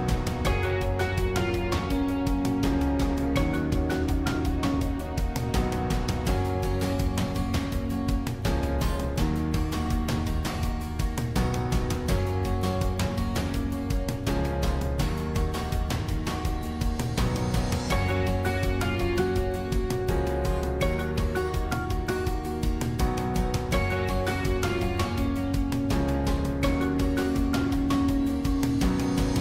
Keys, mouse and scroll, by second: 0.1 middle click, 0.7-2.0 scroll up 1, 2.0-2.5 scroll up 1, 2.5 shift+d, 13.8-15.3 middle drag, 15.3 e, 17.4 scroll down 1, 17.7 middle click, 18.3-18.7 scroll up 2, 18.7-19.8 middle drag, 19.8 i, 22.3-23.5 middle drag, 23.5 e, 25.4 middle click, 26.1 scroll up 1, 26.4-28.1 middle drag, 28.1 shift+d.